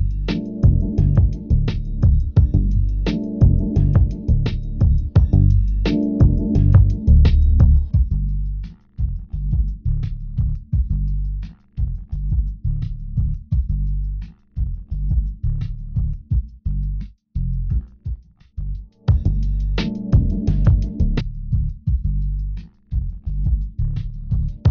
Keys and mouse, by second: 0.5-3.5 drag, 3.0 g, 10.2 g, 11.3-12.4 drag, 18.8 g, 22.5-23.6 right drag, 23.6 g.